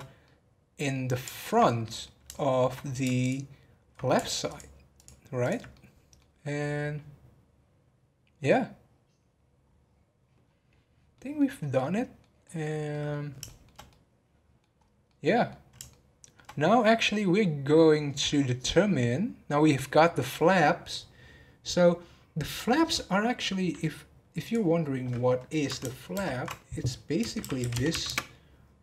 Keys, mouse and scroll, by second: 0.0 scroll up 1, 0.2-3.2 middle drag, 3.2 alt+click, 4.4 alt+click, 4.9 alt+click, 5.4 alt+click, 5.7-8.8 middle drag, 10.4-10.8 scroll down 7, 11.1-14.7 middle drag, 14.7 scroll up 1, 15.0-16.5 middle drag, 16.5 scroll down 1, 16.8-19.8 middle drag, 19.8 scroll down 2.